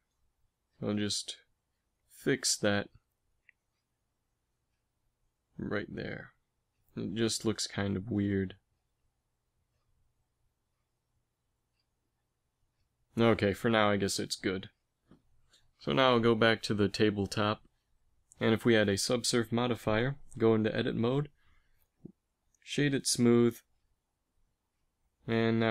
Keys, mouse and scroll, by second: 0.3 Tab, 1.1 ctrl+r, 3.6 g, 5.5 g, 6.9 g, 7.8 ctrl+z, 8.5 ctrl+r, 11.4 Tab, 12.0 a, 14.8 ctrl+s, 18.7 ctrl+2, 20.0 Tab, 21.5 Tab, 22.3 space, 23.6 Tab.